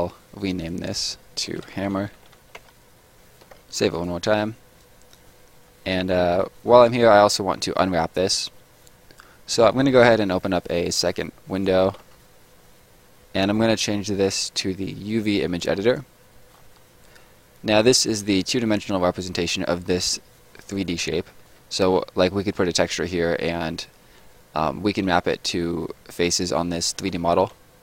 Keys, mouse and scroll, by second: 0.6 click, 1.5-2.7 typing, 3.5 ctrl+s, 3.9 click, 6.3 middle click, 10.1 click, 12.0 t, 13.5 click, 15.9 click, 16.5-16.8 scroll up 1, 19.4-19.9 scroll up 1, 19.9 middle click, 21.3 middle click, 26.3 middle click, 26.9 a.